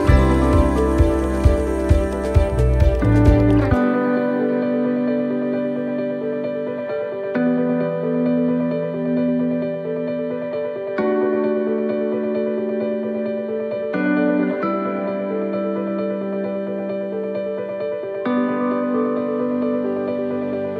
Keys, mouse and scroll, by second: 2.9 middle click, 3.6 c, 6.1 shift+middle click, 6.7 middle click, 7.2 c, 9.5 middle click, 10.4 scroll down 2, 10.8 middle click, 11.5 scroll down 1, 11.9 shift+middle click, 12.4 middle click, 13.2 shift+middle click, 14.6 click.